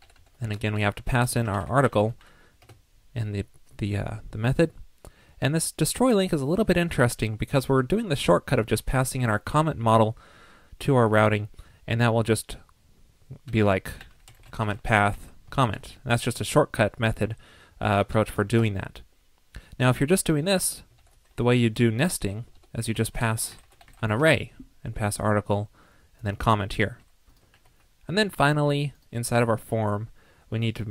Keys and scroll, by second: 0.0 alt+Right, 0.1 alt+Right, 0.7 alt+Left, 15.6 alt+shift+Right, 17.4 super+z, 18.3 alt+shift+Left, 20.9 alt+shift+Right, 22.6 alt+Left, 27.5 super+s.